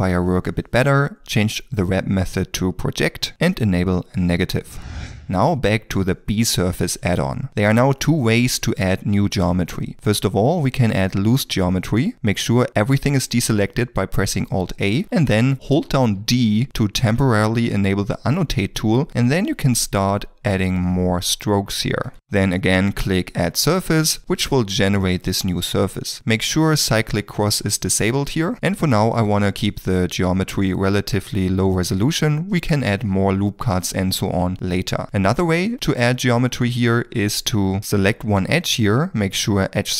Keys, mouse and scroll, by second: 7.5 middle click, 8.0 shift+middle click, 14.7 alt+a, 15.4 shift+middle click, 15.5 d, 16.0 click, 19.1 click, 19.5 click, 19.9 click, 20.2 d, 20.6 click, 21.0 click, 21.4 d, 21.9 d, 22.1 shift+middle click, 35.0 shift+middle click, 36.1 ctrl+middle click, 36.8 2, 37.6 middle click, 38.7 middle click.